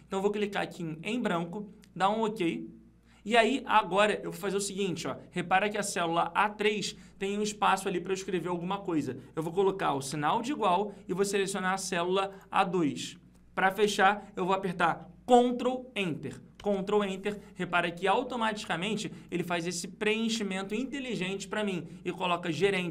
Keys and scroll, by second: 16.8 ctrl+Return.